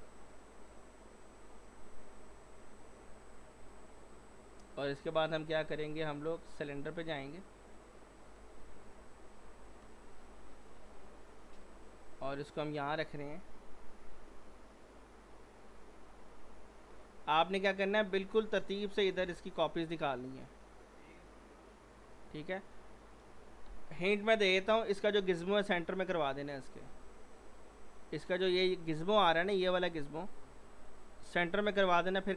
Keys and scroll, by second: 8.4 w, 9.5 t, 9.8 z, 23.7 p.